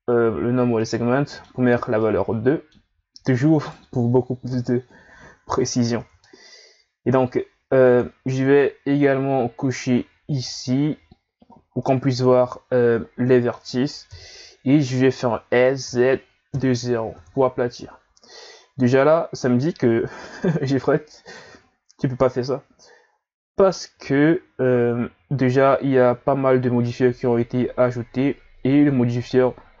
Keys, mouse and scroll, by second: 0.3 a, 0.8-3.6 middle drag, 3.6 right click, 4.5 KP_1, 5.7 scroll up 2, 5.9 Tab, 7.8 click, 11.6 scroll down 1, 11.8-14.1 middle drag, 14.1 KP_1, 15.5 s, 19.7-20.4 scroll down 1, 20.4-21.1 scroll up 1, 21.1 scroll up 1, 21.3 right click, 22.3 click, 24.0 ctrl+z, 28.1-29.1 scroll down 1, 29.1 scroll down 1, 29.2 click.